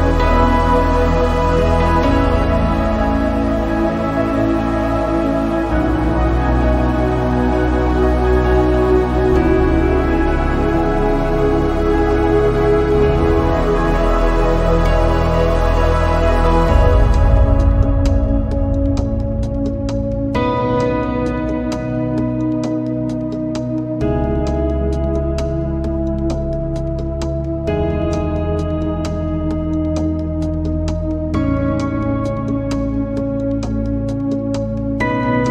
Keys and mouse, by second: 1.0 middle click, 1.9 middle click, 2.9-4.5 drag, 6.7-8.3 drag, 8.0 KP_0, 10.5-12.4 drag, 12.3 KP_0, 17.8 s, 23.3 click, 25.6 click, 27.5 click, 28.2 click, 30.7-32.8 drag.